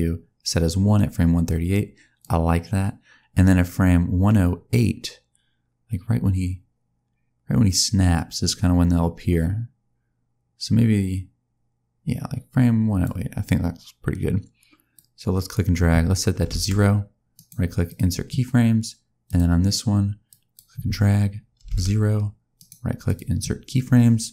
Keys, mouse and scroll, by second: 2.1 click, 14.8 click, 17.8 right click, 19.1 click, 20.1 click, 22.4 right click.